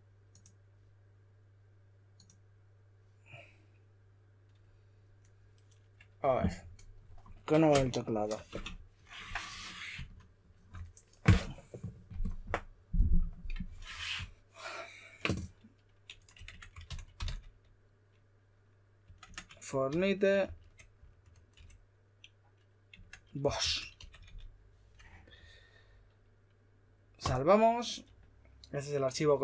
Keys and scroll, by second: 9.1 typing, 16.3-17.7 typing, 19.0-19.9 typing, 21.5 shift+m, 22.9-24.7 typing.